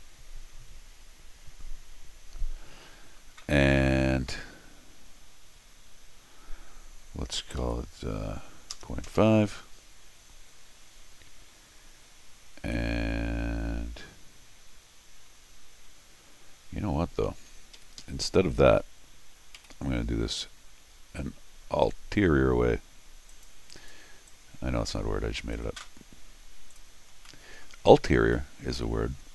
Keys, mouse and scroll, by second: 3.8 x, 17.8 Escape, 18.0 Escape, 19.6 r, 23.3 click, 23.7 click, 24.3-25.5 drag, 26.7 click, 27.3 middle click, 28.0 scroll down 1, 28.3 middle click, 29.1 scroll down 1.